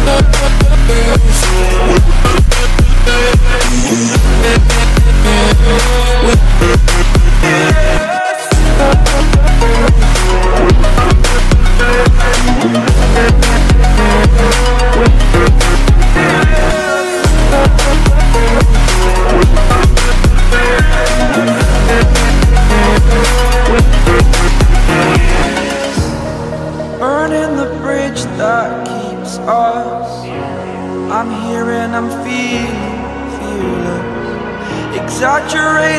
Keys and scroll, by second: 0.2 ctrl+t, 2.9 ctrl+z, 3.5 ctrl+t, 8.6 ctrl+i.